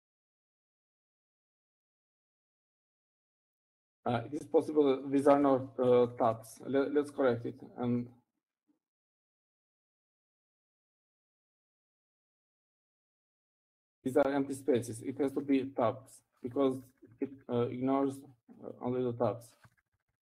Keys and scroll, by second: 2.2 Down, 2.5-2.8 Down, 3.5 Down, 4.2 Right, 4.3 Right, 4.5 Right, 5.2 Right, 5.5 Right, 5.7 Right, 7.2-11.2 typing, 12.8-20.3 typing, 13.3 Down.